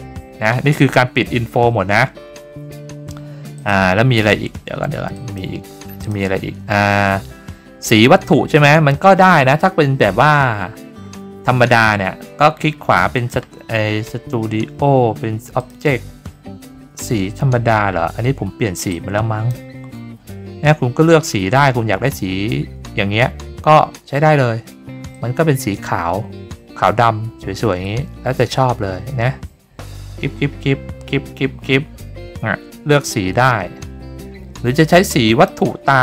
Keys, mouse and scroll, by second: 3.5 click, 5.1 drag, 6.0 click, 11.7 click, 13.1 click, 15.6 click, 18.9-19.5 drag, 25.1-35.4 drag.